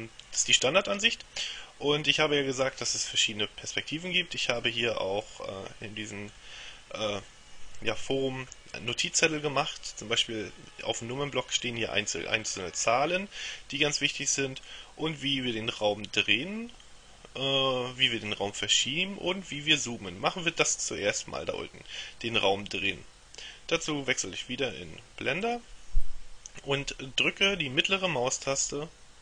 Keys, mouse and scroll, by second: 5.3 click, 6.4-6.9 scroll down 2, 25.5 click.